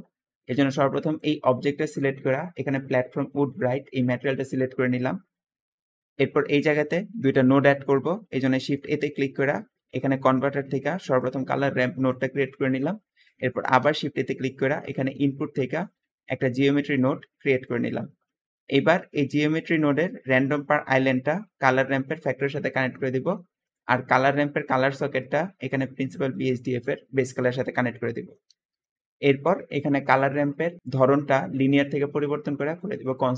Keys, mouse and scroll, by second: 0.4 g, 4.3-5.4 middle drag, 4.3-5.0 scroll up 3, 5.0-5.4 scroll down 2, 8.4 shift+a, 8.5 shift+a, 12.4 middle click, 13.6 shift+a, 22.4 middle click, 22.4-23.0 scroll down 2, 28.8 middle click, 29.1-29.9 middle drag, 29.1-29.5 scroll down 2, 30.1 click.